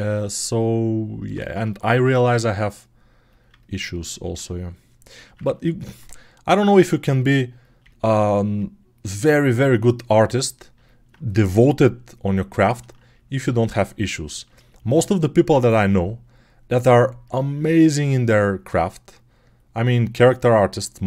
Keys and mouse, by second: 1.2 ctrl+z, 2.2-4.6 right drag, 5.4 alt+click, 5.8-10.9 right drag, 10.9-15.3 drag, 15.3-17.1 right drag, 17.1-21.0 alt+drag.